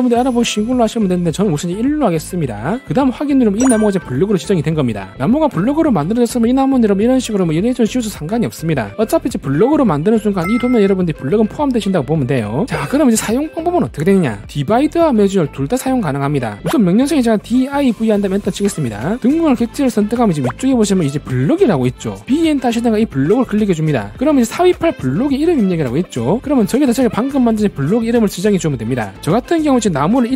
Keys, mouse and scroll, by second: 2.5 click, 6.2 click, 7.2 e, 7.3 right click, 7.6 click, 7.8 click, 8.1 right click, 10.4 scroll down 1, 10.8-11.3 scroll up 1, 11.7 middle click, 17.6 d, 18.2 v, 20.4 click, 24.1 click.